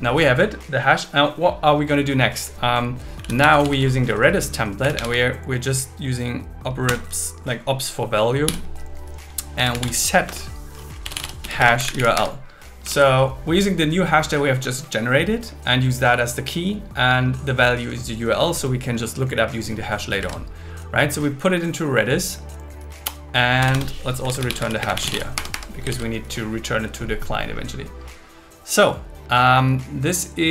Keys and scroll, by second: 6.9 Return, 10.3 Return, 11.6 space, 12.1 Escape, 13.9 super+s, 20.2 super+Right, 23.6 Return, 24.8 space, 25.3 Escape, 25.9 super+s.